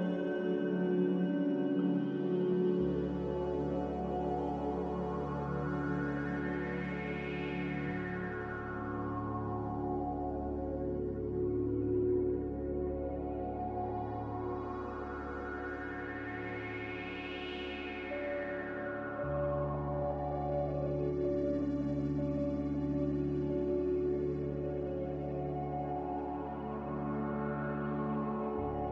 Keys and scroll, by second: 1.5 v, 9.6 a, 16.3 ctrl+c, 16.5 ctrl+v, 18.0 Escape, 18.6 Delete, 19.5 Delete, 27.5 n.